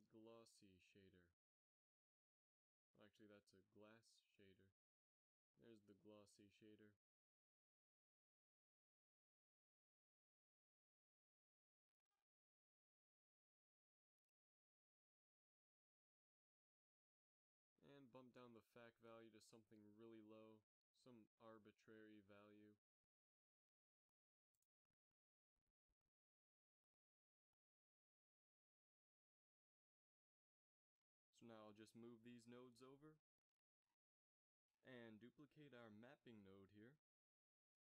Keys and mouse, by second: 1.8 shift+a, 6.5 x, 6.8 shift+a, 26.1 BackSpace, 31.8 a, 32.0 b, 33.1 g, 35.5 a, 36.2-37.8 drag, 36.6 shift+d.